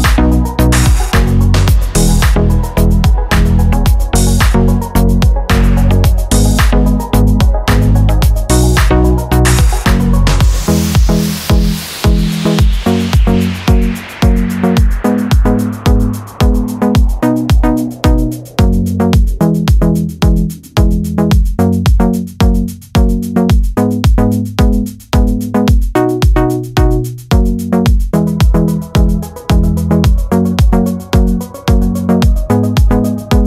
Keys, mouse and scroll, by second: 1.4 click, 3.9 click, 6.2 click, 6.7 click, 8.2 click, 9.2 right click, 10.8 click, 11.9 click, 12.5 click, 14.5 Escape, 15.0 click, 15.3 click, 16.5 shift+,, 17.1 Return, 18.2 click, 19.3 click, 20.3 click, 20.9 click, 21.9 click, 22.9 click, 25.6 click, 26.2 click, 27.1 click, 28.1 click, 30.0 click, 31.0 click, 33.1 click.